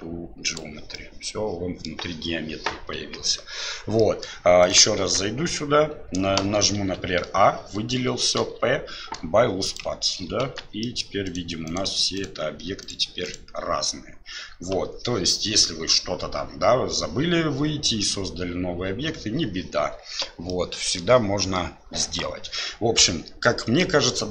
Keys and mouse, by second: 0.9-1.8 middle drag, 2.9 KP_1, 4.0 middle drag, 5.0 Tab, 6.7 a, 10.8 middle click, 20.5 middle click.